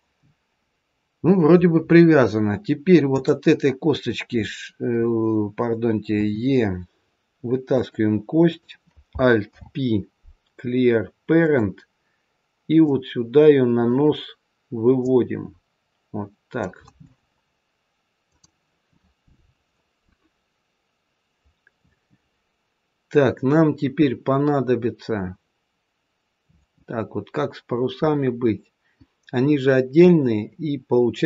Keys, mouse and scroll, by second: 3.0 click, 6.1 e, 8.4 click, 9.4 alt+p, 12.7 click, 15.0 click, 22.2-22.6 scroll down 1, 26.8-28.0 scroll up 2, 28.0 scroll up 1, 28.1-30.0 scroll down 1, 31.0-31.2 scroll down 1.